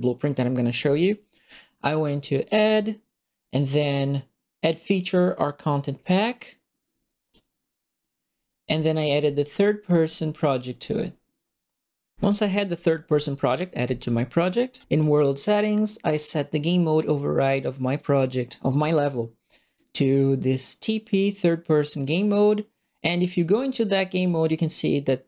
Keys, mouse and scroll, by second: 2.4 click, 7.2 click, 14.7 click, 17.9 click, 18.9 click, 23.2 click, 24.1 click.